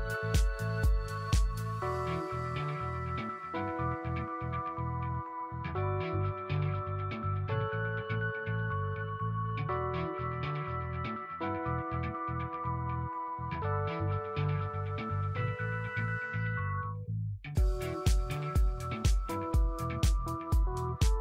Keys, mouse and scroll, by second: 2.0 right click, 2.4 space, 2.8 alt+click, 3.6 scroll down 1, 4.0 click, 5.4 right click, 7.1 click, 7.9 scroll down 1, 8.2 alt+click, 9.9 click, 10.6 alt+click, 11.0 scroll up 1, 11.5 alt+middle click, 12.7 shift+click, 14.0 scroll down 1, 14.5 click, 15.5 right click, 17.4 scroll up 1, 17.5 click, 17.8 Home, 17.8-19.0 typing, 20.0 scroll down 1, 20.0 click, 21.1 click.